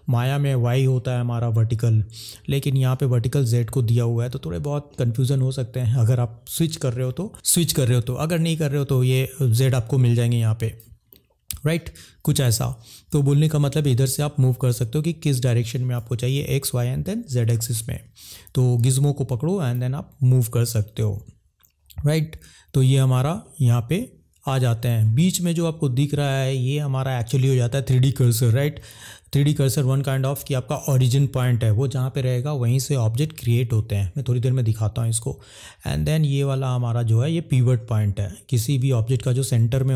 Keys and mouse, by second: 4.8 middle click, 9.6 click, 11.1 middle click, 23.3 middle click.